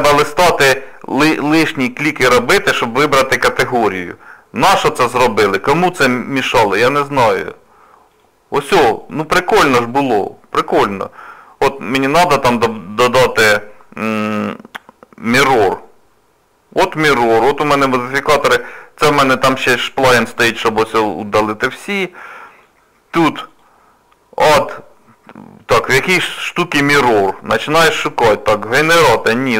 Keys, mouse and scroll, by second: 9.0 click.